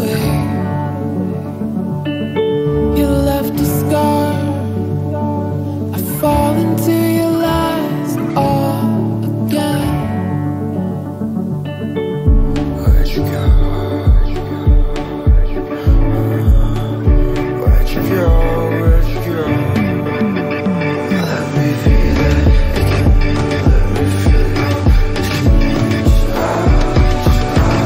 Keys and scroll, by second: 4.6 ctrl+d.